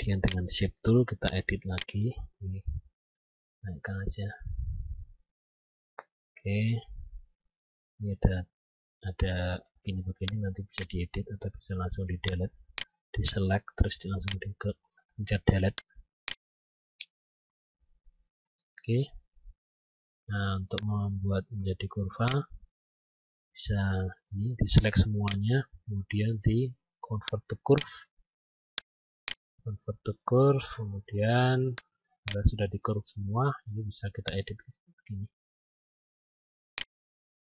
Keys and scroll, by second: 2.6 shift+Up.